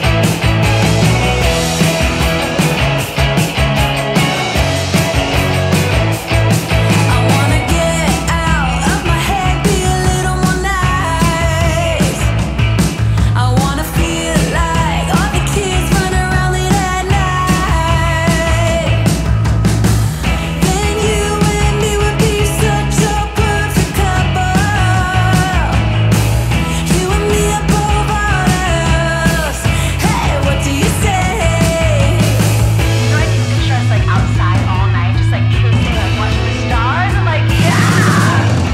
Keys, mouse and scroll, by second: 9.7-10.7 shift+drag, 14.5-17.9 typing, 19.0 click, 20.8 scroll up 1, 24.1 click, 25.5 shift+click, 26.2-27.3 scroll down 1, 27.3-32.0 drag.